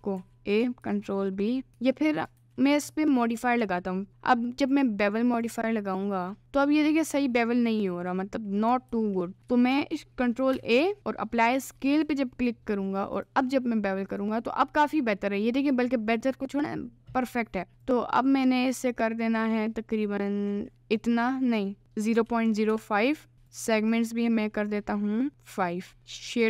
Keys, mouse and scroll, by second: 0.1 a, 0.8 ctrl+b, 1.7 Tab, 2.4 ctrl+a, 3.1 middle click, 4.7 click, 5.5 click, 6.4-8.6 middle drag, 8.8 ctrl+a, 13.2-14.3 drag, 14.9 middle click, 15.5 middle click, 17.9-21.1 drag, 21.8-22.8 drag, 23.5 click, 23.8 click, 25.3 click, 25.9 middle click, 26.0 right click.